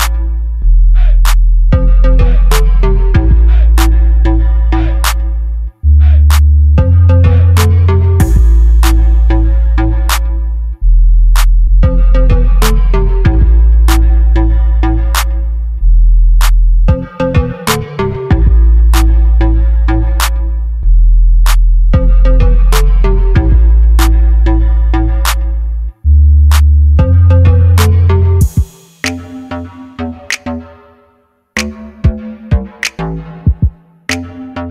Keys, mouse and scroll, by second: 1.1 right click, 2.4 right click, 5.1-7.2 middle drag, 10.3 middle click, 11.8 middle click, 13.1 right click, 14.1 click, 15.3 click, 17.2 KP_0, 18.2 KP_0, 21.3 middle click, 22.6 right click, 23.3 middle click, 23.8 click, 25.4 KP_0, 27.4-28.5 drag, 29.7-30.9 drag, 30.9 middle click, 33.5 right click, 34.1-34.7 drag, 34.1 right click.